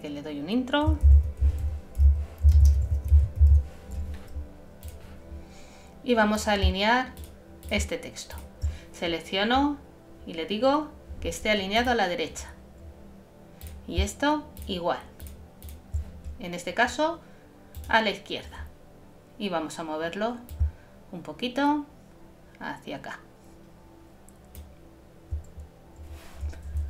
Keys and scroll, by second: 1.0 shift+m, 2.6 shift+space, 2.8 shift+e.